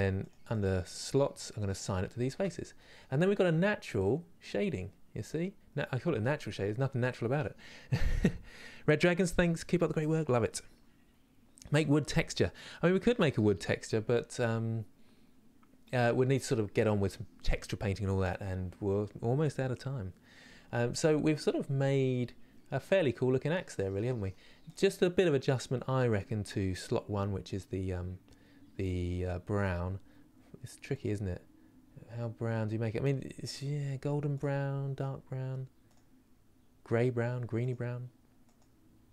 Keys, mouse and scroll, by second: 0.2-2.0 drag, 2.0 Tab, 2.3 scroll down 4, 2.7-23.7 middle drag, 24.3 click, 27.1-30.6 drag.